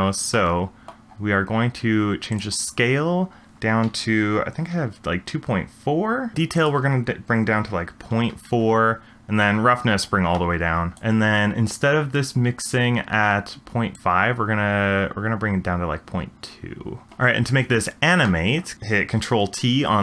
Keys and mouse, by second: 0.3 middle click, 2.9-6.3 drag, 6.6-8.2 drag, 9.4 click, 14.1-17.1 drag.